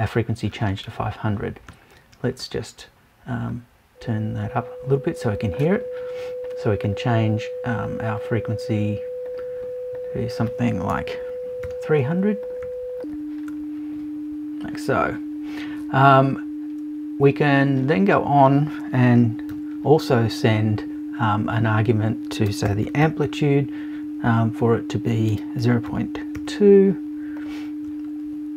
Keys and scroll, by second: 10.9 BackSpace.